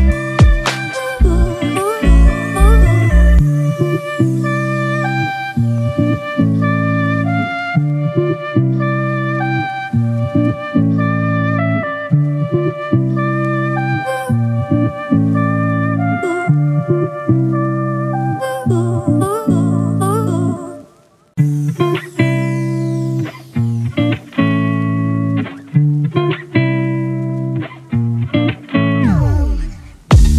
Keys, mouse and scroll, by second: 10.4 ctrl+t, 11.4 alt+shift+click, 17.9 alt+shift+click, 21.0 ctrl+t, 21.7 alt+shift+click, 25.2 alt+shift+click, 28.4 Return.